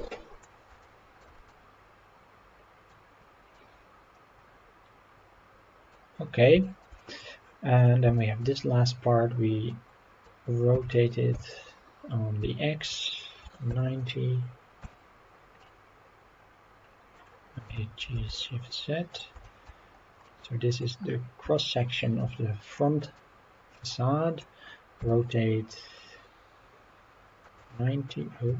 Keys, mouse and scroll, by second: 0.8-1.2 shift+middle drag, 1.5-2.9 middle drag, 3.1-3.4 scroll down 2, 3.5-5.9 middle drag, 6.1-6.4 scroll down 3, 6.6 shift+middle drag, 7.0 middle drag, 7.8 click, 8.1 shift+middle drag, 8.7-9.1 scroll up 3, 9.1 scroll down 2, 9.7-10.2 middle drag, 10.7 r, 11.3 y, 12.4 x, 13.4 KP_9, 13.7 KP_0, 14.8 Return, 15.6-17.1 middle drag, 17.7 g, 18.2 shift+z, 19.1 drag, 19.4 shift+middle click, 19.8 scroll up 2, 20.2-20.8 middle drag, 20.9-21.4 scroll up 4, 21.5-22.2 shift+middle drag, 22.7-23.2 middle drag, 23.3-23.9 scroll down 2, 23.9 middle click, 25.0 r, 27.4 KP_9, 27.6 KP_0, 28.4 Escape.